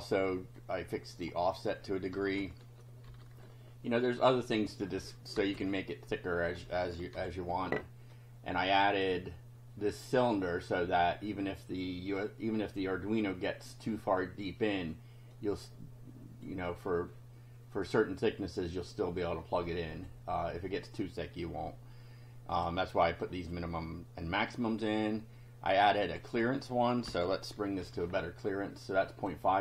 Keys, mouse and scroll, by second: 0.6 click, 2.2 BackSpace, 2.3 2, 3.0 F5, 5.3 BackSpace, 5.6 3, 7.1 F5, 8.1-9.2 drag, 15.3-16.6 drag, 19.4 click, 22.5 click, 23.2 click, 24.3-24.6 scroll down 2, 25.7 click, 27.0 Delete, 27.8 F5, 28.8 click.